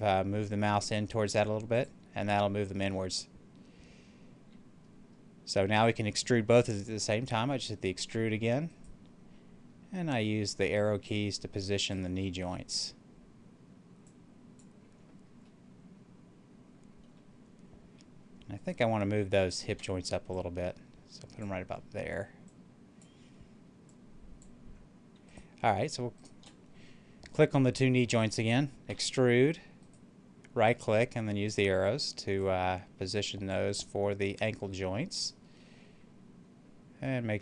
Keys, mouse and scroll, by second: 1.6 click, 2.0-8.0 middle drag, 8.0 e, 8.6 right click, 10.0-15.3 drag, 15.3-18.4 middle drag, 18.4 right click, 19.2 shift+right click, 20.1-25.2 drag, 25.2 right click, 26.1 shift+right click, 28.8 e, 29.7 right click, 30.7-35.5 drag, 35.5-37.4 middle drag.